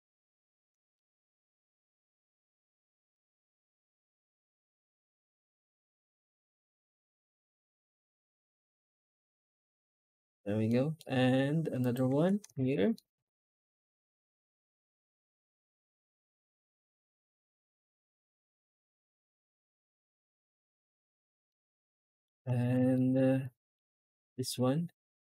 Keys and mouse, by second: 0.8-1.2 shift+middle drag, 2.0 F10, 3.0 F9, 10.6 middle click, 10.8 middle click, 11.9 Tab, 12.6 alt+shift+z, 12.8 shift+middle drag, 13.3 a, 21.3-22.1 middle drag, 22.9 shift+middle drag, 23.3-23.6 middle drag, 24.1-24.4 right drag, 24.4-24.9 middle drag, 25.0 Tab.